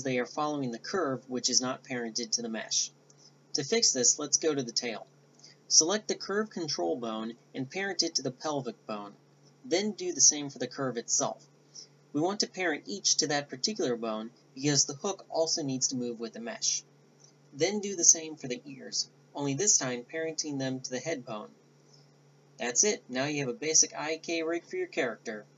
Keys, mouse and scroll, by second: 0.5-2.8 right drag, 2.8 click, 2.9 Tab, 2.9-5.4 right drag, 3.1 click, 4.9 ctrl+p, 6.3 Tab, 7.6-8.6 drag, 8.9 KP_5, 9.3 z, 10.5-11.9 drag, 11.6 ctrl+p, 12.1 a, 12.3 g, 13.3 middle click, 13.6 KP_1, 13.7 KP_5, 14.3 Tab, 14.5 z, 15.6 middle click, 15.8 right click, 16.1 ctrl+p, 16.3 ctrl+p, 17.4 ctrl+p, 18.0 a, 18.1 Tab, 20.4 ctrl+p, 21.0 Tab, 21.1 Tab, 21.7-22.8 drag, 25.2 right click.